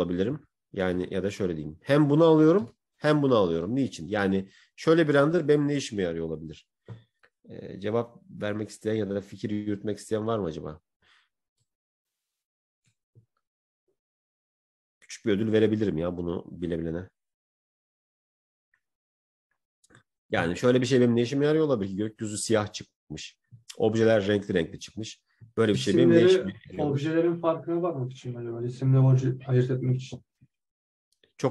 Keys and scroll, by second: 3.0 Right, 5.3 Right, 5.3 Left.